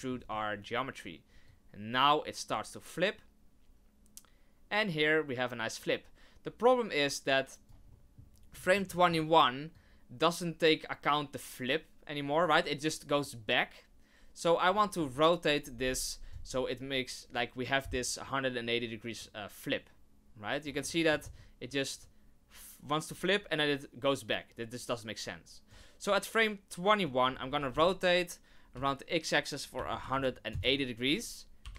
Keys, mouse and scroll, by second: 1.4 click, 7.9 middle click, 8.3 scroll down 2, 8.6 shift+middle click, 8.9 middle click, 9.7 click, 19.2 click, 20.8 middle click, 21.0 middle click, 21.2 scroll up 2, 22.0 click, 26.1 click, 27.5 r, 31.6 i.